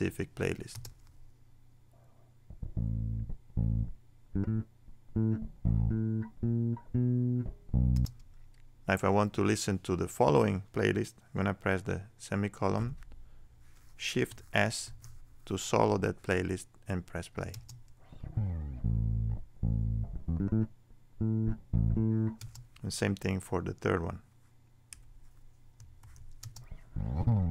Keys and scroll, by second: 12.8 ;, 14.3 shift+;, 14.8 shift+s.